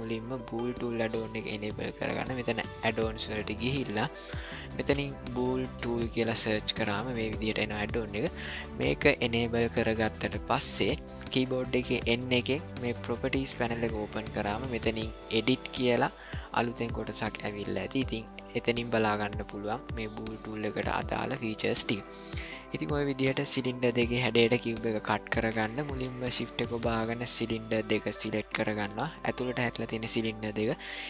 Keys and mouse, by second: 12.0 n, 15.3 click.